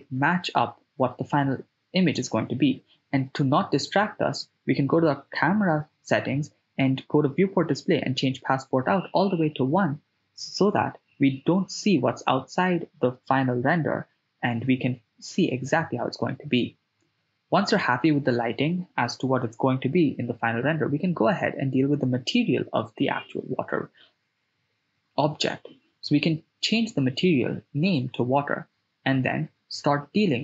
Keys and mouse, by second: 0.3 click, 1.5 click, 2.0 click, 2.9 click, 4.4 shift+space, 7.4 shift+space, 7.9 right click, 8.8 g, 8.9 z, 12.7 click, 13.3 click, 14.5 right click, 17.8 click, 21.8-25.0 drag, 28.4 click, 29.6 KP_0.